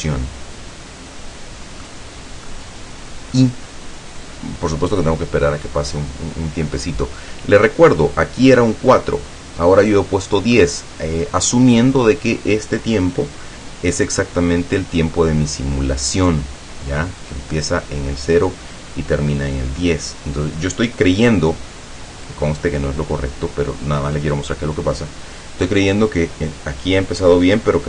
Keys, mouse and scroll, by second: 2.5-3.6 middle drag.